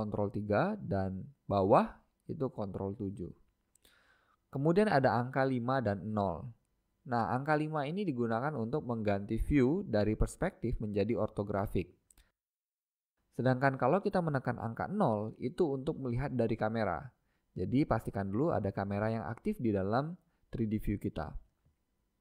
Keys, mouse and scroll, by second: 1.1 ctrl+KP_7, 3.6 KP_1, 5.4-8.1 middle drag, 9.0 KP_5, 11.8 KP_5, 12.4-13.2 KP_5, 14.9-18.7 middle drag, 16.0 KP_0, 20.6 KP_0, 22.1 middle click.